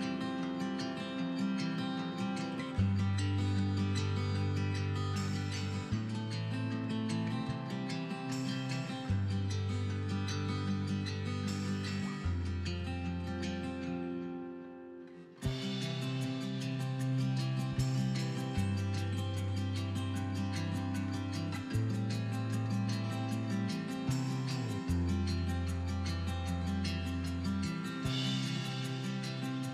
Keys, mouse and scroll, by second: 0.4 click, 0.5 middle click, 0.8 KP_1, 1.0-1.4 scroll up 1, 1.4 g, 2.3 click, 2.4 middle click, 2.7 scroll up 1, 2.8 middle click, 3.6 scroll up 1, 3.8 KP_3, 4.2 g, 4.7 click, 4.8-5.2 scroll down 2, 4.9-9.9 middle drag, 5.4-5.8 scroll up 2, 6.1 Tab, 6.4-6.7 scroll up 1, 9.9 right click, 10.0-11.5 middle drag, 10.2 scroll down 2, 10.6 g, 11.5 click, 11.6-14.5 middle drag, 11.8-12.2 scroll up 4, 12.2 scroll down 2, 12.5 scroll up 2, 12.9-13.3 scroll down 4, 13.4-14.0 scroll up 2, 14.4 scroll down 2, 14.5 click, 14.6-15.5 middle drag, 15.0 KP_1, 15.5 g, 16.0 click, 16.1 middle click, 16.2 scroll down 1, 16.3 middle click, 16.7 scroll up 1, 16.8 shift+middle click, 17.2 scroll up 1, 17.4 scroll down 1, 17.9 shift+a, 18.4 scroll down 1, 18.4 middle click, 18.8 s, 19.2 click, 19.3 middle click, 19.4 scroll up 1, 19.7 scroll down 1, 19.8 middle click, 20.3 g, 21.2 click, 21.2 middle click, 21.5 KP_1, 22.0-22.6 scroll up 2, 22.3 shift+middle click, 22.7 g, 23.2 click, 23.3 middle click, 23.4 scroll down 1, 23.5 middle click, 23.6 KP_1, 24.1-24.5 scroll up 2, 24.3 shift+middle drag, 24.5 shift+middle click, 24.7-25.1 scroll down 1, 25.5 g, 26.3 click, 26.9 s, 28.2 click, 28.4 middle click, 28.6 scroll down 1, 28.9 KP_1, 29.6 g.